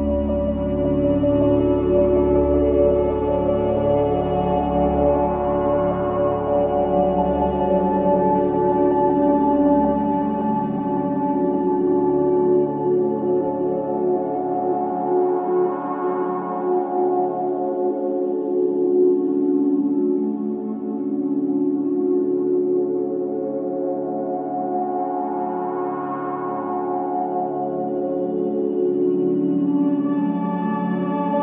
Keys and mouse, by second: 0.7 click, 6.2 click, 7.3 g, 15.5 click, 17.5-19.1 drag, 19.1 s, 22.7 g, 29.4 Tab, 30.2 Tab, 31.2 a.